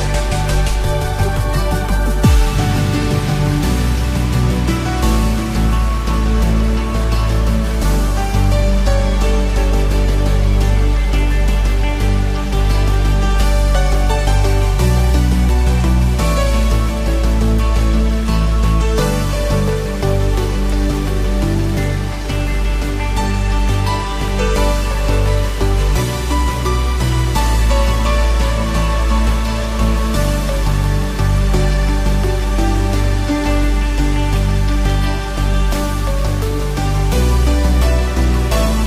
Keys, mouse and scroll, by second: 0.4-2.5 typing, 2.8 Return, 3.4-4.1 scroll down 2, 3.7-5.1 middle drag, 5.3-5.8 scroll up 3, 5.8 Tab, 6.3-6.8 scroll up 2, 7.4 3, 8.2 shift+click, 8.7 shift+click, 9.3 shift+click, 9.7 shift+click, 10.2 shift+click, 10.6 shift+click, 11.0 middle click, 12.2 shift+middle click, 13.6-14.9 drag, 15.9-18.5 drag, 19.0-19.7 scroll down 2, 19.7 Tab, 20.1-20.9 middle drag, 21.4 click, 21.9 Tab, 22.3 scroll up 1, 22.4 middle click, 23.3 click, 23.9 shift+click, 24.3 shift+click, 24.8 shift+click, 25.3 shift+click, 25.7 shift+click, 26.1 shift+click, 26.5 middle click, 27.9 click, 29.5-32.1 drag, 32.5 scroll down 1, 32.7 scroll up 1, 32.8-35.1 middle drag, 35.3 Tab, 36.3 click.